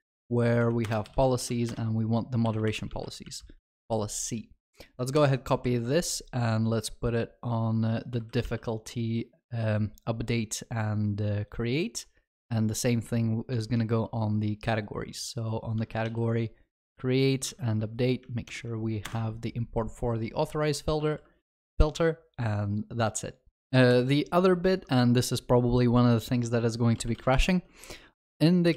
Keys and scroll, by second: 8.4 ctrl+v, 8.5 ctrl+s, 15.9 ctrl+v, 16.1 ctrl+s, 18.5 alt+Return, 24.0 ctrl+shift+n.